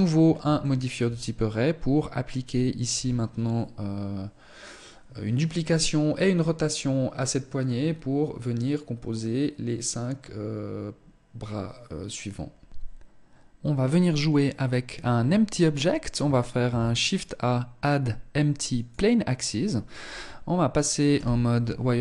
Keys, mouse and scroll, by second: 15.9 shift+a, 20.4 z, 21.4 shift+middle click, 21.9-22.0 scroll down 2.